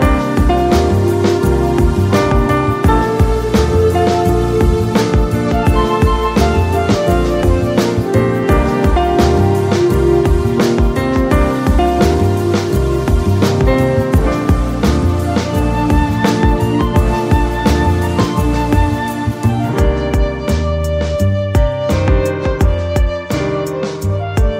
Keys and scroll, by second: 0.8 space, 2.7 space, 5.8 space, 6.5 ctrl+z, 11.7 ctrl+j, 12.5 space, 14.1 ctrl+j, 20.4 ctrl+v.